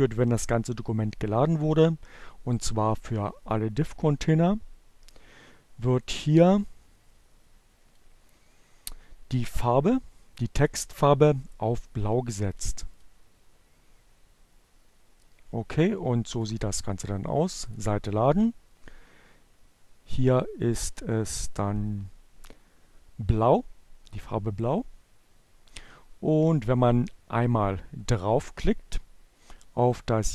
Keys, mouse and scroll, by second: 2.3 click, 4.9-7.1 drag, 10.0-12.1 drag, 12.2 click, 16.1 click, 17.1 click.